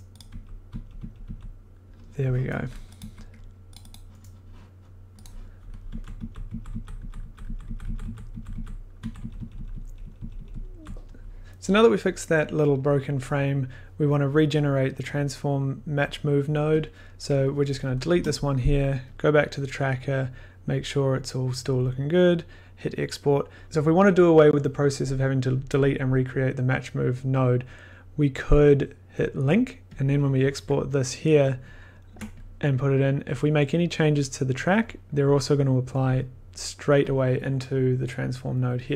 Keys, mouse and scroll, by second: 0.1 click, 0.3 Right, 0.7 Tab, 0.7-2.9 drag, 1.0 Tab, 1.2 Tab, 3.0 1, 3.7 click, 3.9 click, 5.2 click, 5.9 Left, 6.1 Left, 6.4 Right, 6.6 Right, 6.9 Right, 7.1 Right, 7.4 Right, 7.6 Right, 7.8 Right, 8.0 Right, 8.0 click, 8.2 Right, 8.4 Right, 11.4 scroll, 15.1 click, 16.3 click, 16.8 click, 17.7 click, 18.1 BackSpace, 18.9 click, 19.0 click, 19.1 click, 29.2 click, 29.9 click, 32.0 ctrl+click, 32.7 click, 33.3 click, 36.5 click, 37.3 click, 38.9 click, 38.9 click.